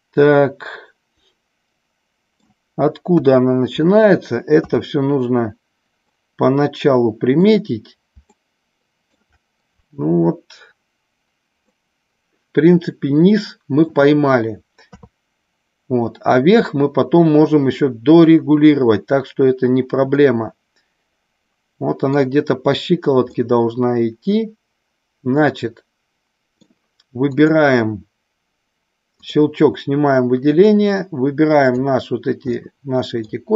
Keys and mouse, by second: 3.1 KP_1, 4.6 KP_3, 6.0-7.4 middle drag, 8.2 shift+middle click, 11.7-13.8 middle drag, 14.9 KP_3, 20.1-22.1 middle drag, 23.2-26.6 middle drag, 27.3 click, 29.2 click, 30.6-31.8 drag, 32.5 middle click.